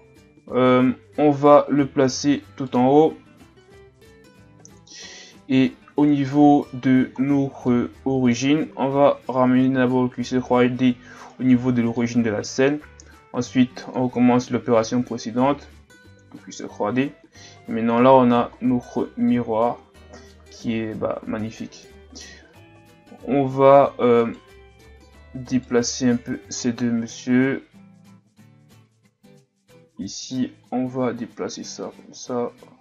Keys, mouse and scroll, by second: 2.6 click, 5.5-6.1 scroll up 2, 6.1 right click, 7.2 ctrl+scroll down 1, 7.7-9.3 middle drag, 9.3 shift+c, 12.0-13.8 middle drag, 13.8 click, 17.4-17.8 scroll down 2, 17.8-18.6 scroll up 8, 18.6-19.2 shift+scroll down 5, 19.2-19.8 ctrl+scroll up 3, 19.8-20.3 scroll down 3, 20.3 middle click, 20.8-21.7 scroll up 3, 21.7-22.1 scroll down 5, 24.2 right click, 25.5 shift+right click, 26.2-27.5 scroll up 1, 28.0 Tab, 28.7 Tab, 29.2 Tab, 29.7 a, 30.0 a, 30.7 click.